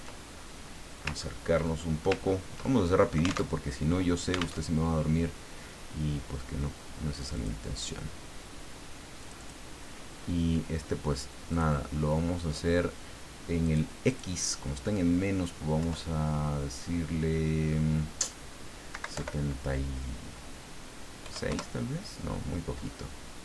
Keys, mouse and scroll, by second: 0.2-0.7 ctrl+scroll up 2, 0.7 scroll down 1, 1.2-1.5 ctrl+scroll up 1, 1.6 ctrl+click, 2.3 ctrl+scroll up 1, 2.6 ctrl+click, 3.5 ctrl+alt+Tab, 4.6 alt+Tab, 7.2 click, 9.2 click, 11.5 click, 13.6 click, 14.0 click, 15.8 Left, 18.9 Right, 19.1 Delete, 21.2 KP_6, 21.5 KP_Enter.